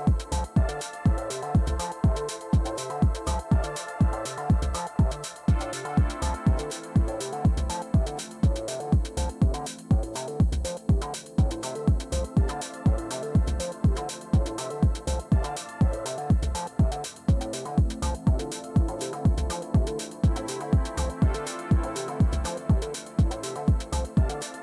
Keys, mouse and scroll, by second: 3.9-9.8 typing, 10.8-18.5 typing, 20.8 Return, 23.3 Return.